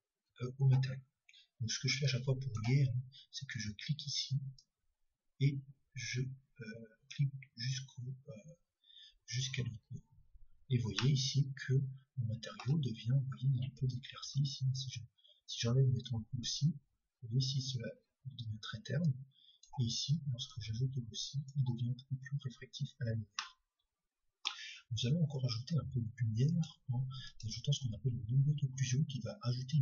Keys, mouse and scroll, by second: 2.1-3.9 drag, 4.6-7.1 drag, 12.5-13.8 middle drag, 16.1-17.9 drag, 19.6-22.5 drag, 23.8-26.8 middle drag, 26.8-29.8 drag.